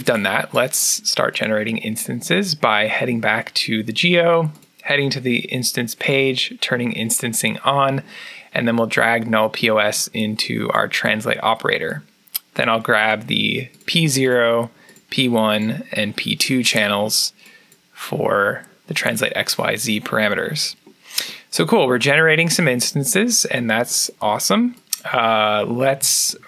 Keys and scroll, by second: 25.7 Tab.